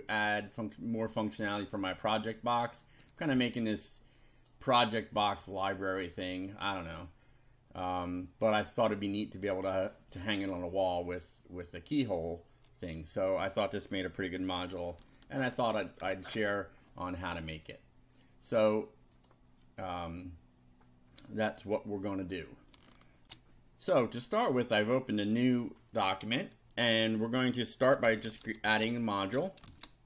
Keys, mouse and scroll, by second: 0.3 click, 1.6-4.6 drag, 4.8-8.1 drag, 15.3 ctrl+alt+Right, 16.3 ctrl+alt+Left, 19.2 click, 23.2 ctrl+r, 27.7-29.6 typing.